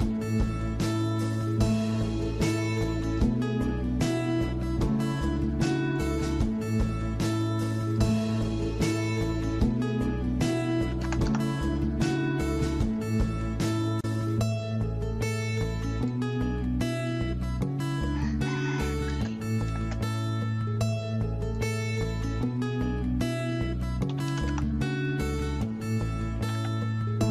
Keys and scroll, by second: 10.7-11.6 typing, 19.0-19.6 typing, 23.9-24.6 typing, 26.2-26.9 typing.